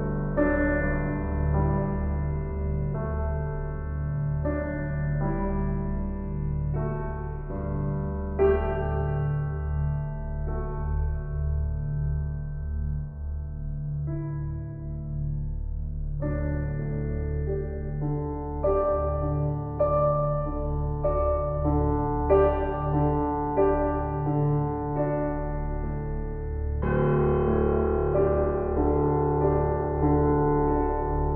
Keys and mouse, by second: 2.4 click, 3.5-4.2 typing, 3.5 click, 4.5 click, 5.4 click, 8.0 click, 9.7 ctrl+alt+click, 10.7 alt+shift+click, 11.1 ctrl+alt+click, 16.8 ctrl+alt+click, 17.1-19.2 alt+shift+drag, 19.6 click, 21.3 click, 22.3 click, 22.7 alt+click, 23.7 click, 24.5 click, 25.4 click, 25.8 click, 26.5 click, 30.0 click, 30.6 click.